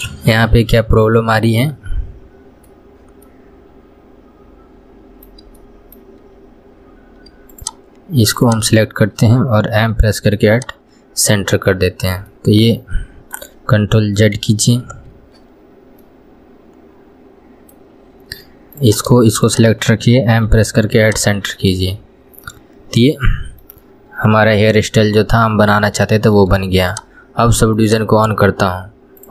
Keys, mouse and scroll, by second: 0.0 scroll up 2, 0.4-3.4 middle drag, 3.6-7.9 middle drag, 7.9 shift+click, 8.7 shift+click, 10.3 m, 12.3 scroll down 1, 12.6-14.7 middle drag, 14.7 ctrl+z, 16.4-19.1 middle drag, 19.1 click, 19.8 shift+click, 22.3-24.1 middle drag, 24.1 scroll down 1, 24.9 KP_1, 25.2 scroll down 1, 26.5 shift+middle click, 27.2 click.